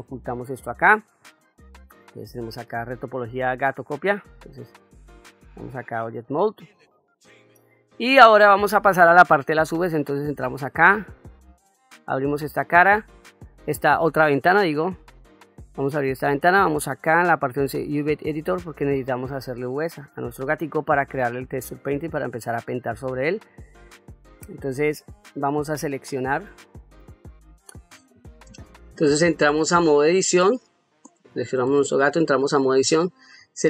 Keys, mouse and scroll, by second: 0.4 middle click, 4.9 Tab, 6.0 shift+middle click, 6.8-7.7 ctrl+middle drag, 9.8-12.3 drag, 16.4-18.0 drag, 19.2-19.9 middle drag, 20.4-20.8 shift+middle drag, 21.2-22.0 ctrl+middle drag, 22.5 middle click, 23.8-24.3 middle drag, 24.7 middle click, 26.3 a, 26.9 click, 31.0 click.